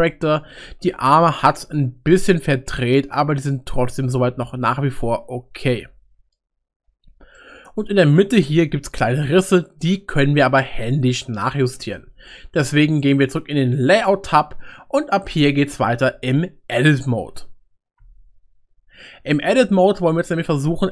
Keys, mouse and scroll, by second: 0.4-6.3 middle drag, 7.4 shift+middle click.